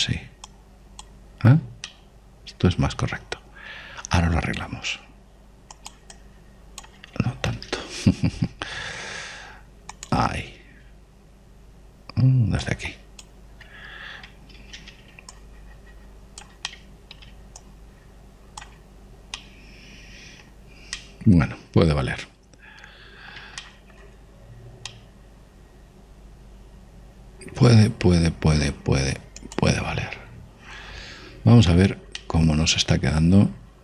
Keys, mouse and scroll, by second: 2.9-6.3 middle drag, 5.9 f, 7.1 click, 8.7 ctrl+z, 9.8 shift+f, 12.0 click, 13.0 middle click, 13.8 click, 15.7 ctrl+z, 16.3 click, 17.7 middle click, 18.1 middle click, 18.6 click, 18.6 right click, 19.4 right click, 20.3-23.6 middle drag, 23.7 middle click, 24.6-28.2 middle drag, 28.3 middle click, 29.2-33.8 middle drag.